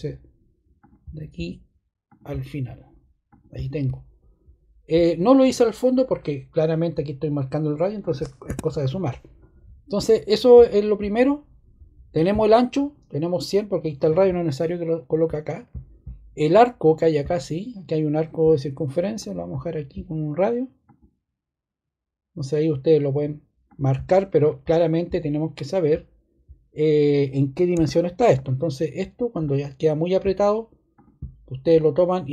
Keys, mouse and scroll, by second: 8.4 ⟲, 27.7-28.3 scroll, 30.9 click, 31.7 click.